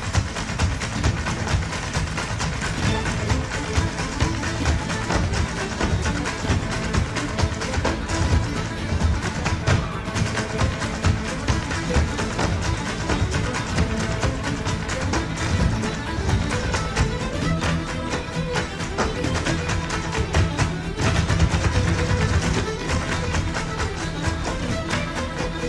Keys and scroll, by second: 3.3 super+j, 16.5 super+z, 19.5 super+z, 21.7 alt+super+z, 24.0 Escape.